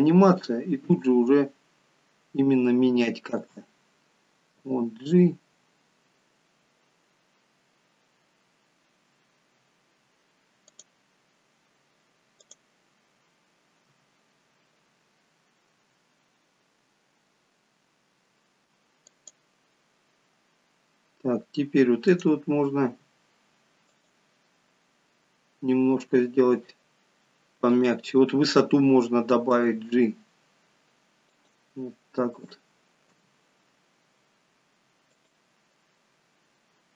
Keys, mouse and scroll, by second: 0.9 space, 3.3 space, 4.6 g, 12.5 click, 22.2 click, 22.9 r, 27.7 click, 29.5 g, 32.8 click, 33.2 g.